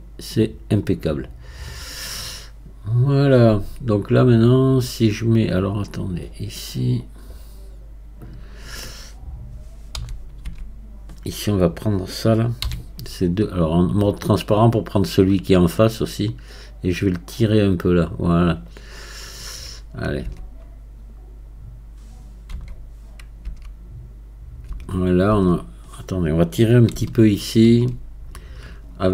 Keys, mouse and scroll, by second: 7.0 click, 7.8-10.0 scroll up 2, 10.0 z, 16.9-19.2 drag, 19.2-20.3 scroll down 1, 20.3 Tab, 22.6 z, 23.5 Tab, 27.4-29.1 alt+drag.